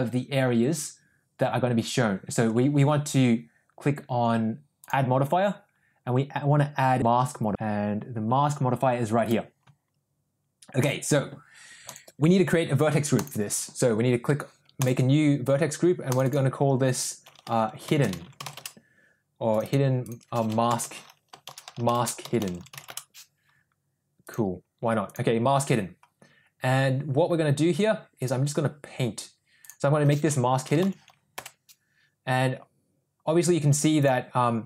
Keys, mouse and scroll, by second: 4.8-9.6 drag, 10.8-11.9 drag, 13.2 click, 15.2 click, 16.2-23.6 drag, 18.2 d, 22.6 d, 24.4 click, 28.2 click, 29.7-32.0 drag, 34.1 click.